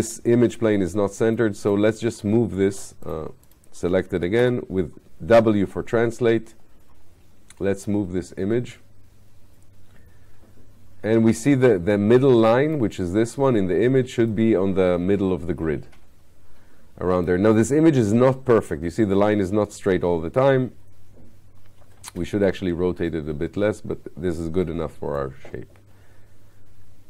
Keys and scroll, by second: 4.5 w.